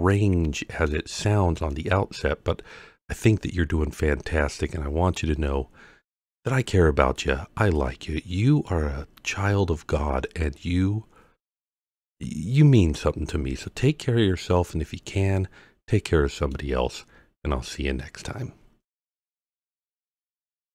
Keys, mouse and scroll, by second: 1.2-1.7 scroll down 3, 1.7-3.2 middle drag, 7.7-8.7 middle drag, 9.3 scroll up 2, 14.4-17.5 middle drag.